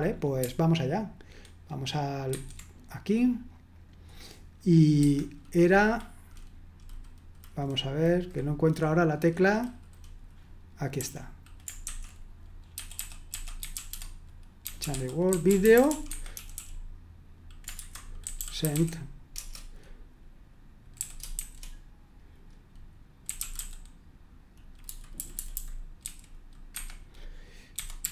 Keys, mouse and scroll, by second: 2.3 super+1, 3.7 click, 5.0 Escape, 11.0-18.7 typing, 20.9-21.3 typing, 23.0-24.1 typing, 25.1-26.0 typing, 26.7 Escape, 27.8-28.1 typing.